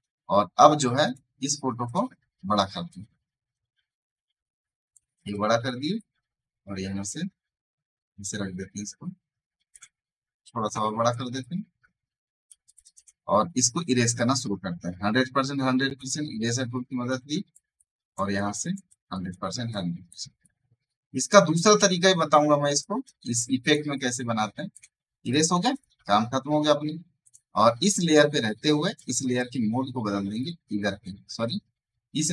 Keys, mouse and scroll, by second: 0.1 scroll down 2, 0.9 click, 2.8-5.2 alt+drag, 5.2 click, 5.9-10.4 ctrl+drag, 10.4 alt+shift+click, 11.3 ctrl+click, 13.7 e, 15.9-24.8 drag, 24.8 v, 25.1 click, 25.3 space, 25.4 right click, 25.6 click.